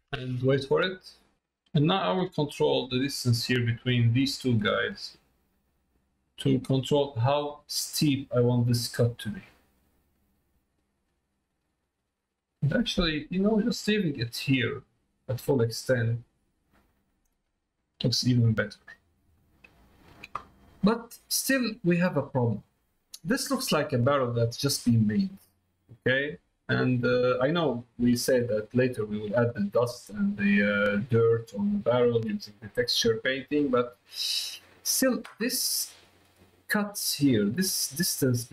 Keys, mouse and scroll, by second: 1.9-3.9 drag, 4.6-9.0 drag, 9.7-11.7 drag, 12.5 click, 14.9 middle click, 16.2 middle click, 16.9 middle click, 17.8 middle click, 19.0 middle click, 19.9 shift+middle click, 20.8 middle click, 21.4 shift+middle click, 22.4 middle click, 23.1 middle click, 24.0 middle click, 24.6 middle click, 25.1 shift+middle click, 27.3 middle click, 28.1 shift+middle click, 29.0 middle click, 31.8 shift+middle click, 32.9 middle click, 34.1 middle click.